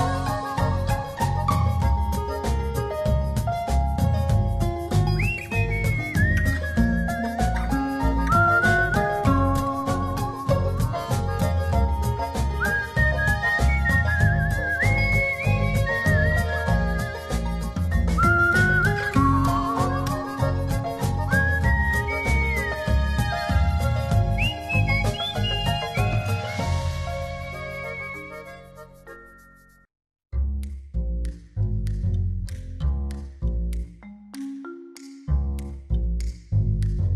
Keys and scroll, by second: 1.6 space, 2.1 z, 3.0 alt+space, 3.4 v, 5.0 Left, 6.6 space, 8.1 space, 11.0 space, 12.5 shift+Left, 13.9 a, 15.4 shift+Left, 25.0 Left, 25.5 Down, 27.4 space.